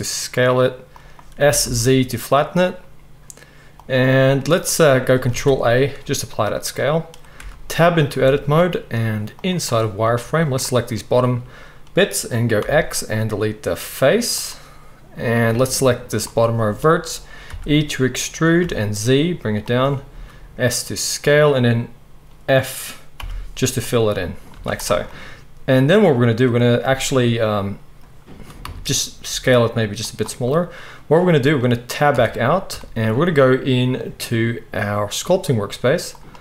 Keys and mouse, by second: 1.4 s, 5.3 ctrl+a, 7.4 Tab, 8.2 z, 9.9-17.5 drag, 12.6 x, 17.5-19.7 middle drag, 17.5 e, 19.7-29.3 right drag, 20.1 s, 23.2 f, 24.5 z, 28.6 a, 29.3-36.4 drag, 29.3 s, 32.1 Tab.